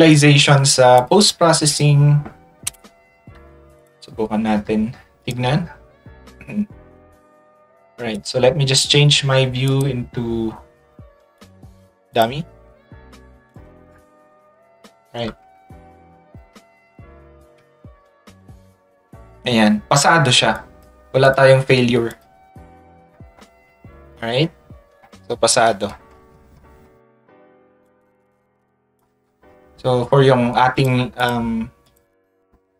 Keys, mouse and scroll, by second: 3.8 click, 5.2 click, 8.1 click, 9.7 click, 11.3 click, 12.1 click, 13.5 click, 20.5 click, 21.2 click, 22.1-23.1 scroll down 1, 24.1 scroll down 1, 28.3 click, 30.7 click, 31.2 click, 31.9 click.